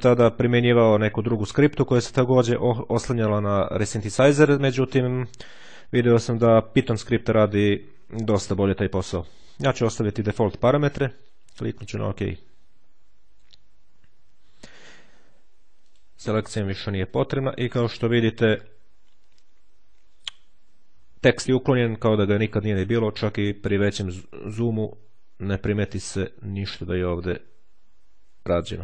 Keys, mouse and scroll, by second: 11.5-12.7 drag, 15.7 click, 16.7 click, 18.7-19.4 ctrl+scroll up 1, 19.7-20.5 ctrl+scroll down 1, 20.7-21.3 ctrl+scroll up 1, 22.7-23.3 ctrl+scroll up 2, 23.7-24.2 ctrl+scroll up 2, 24.3-24.9 scroll down 2, 24.9-25.7 scroll up 2, 26.2-26.8 shift+scroll down 2, 26.8-28.4 shift+scroll up 3, 28.7-28.8 ctrl+scroll down 2.